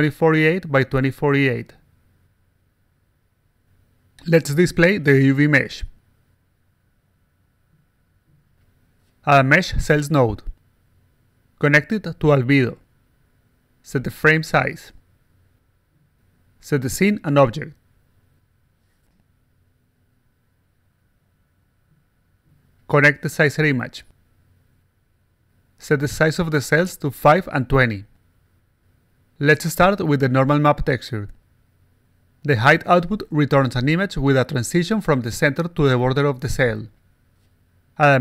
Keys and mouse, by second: 0.0-1.0 typing, 2.2 click, 2.4 click, 2.7-4.0 alt+drag, 4.9 click, 5.3 click, 5.7-7.7 typing, 8.3 click, 9.8 click, 11.4-12.7 drag, 13.7 click, 14.0 click, 14.0-16.0 typing, 16.6 click, 17.0 click, 17.8 click, 18.2 click, 20.4-21.0 alt+drag, 21.3-21.6 alt+drag, 21.8-22.5 alt+drag, 23.5 click, 25.7 click, 26.4 0, 27.7 alt+click, 28.1-28.6 alt+drag, 29.1-30.2 alt+drag, 31.2 click, 33.1 click, 34.1-35.5 alt+drag, 37.6 click.